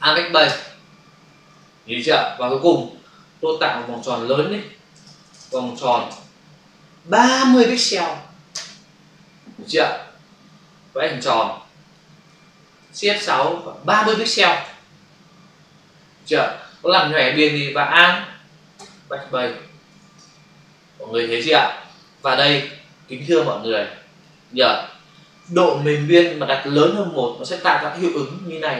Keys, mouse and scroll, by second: 0.5 alt+BackSpace, 1.5 ctrl+d, 3.8 ctrl+shift+n, 4.6-7.0 typing, 8.6 Return, 10.4 shift+click, 13.1 shift+F6, 13.9 typing, 14.5 Return, 18.8 alt+BackSpace, 19.9 ctrl+d, 22.4 space, 22.7 ctrl+click, 23.5 click, 24.5 ctrl+click.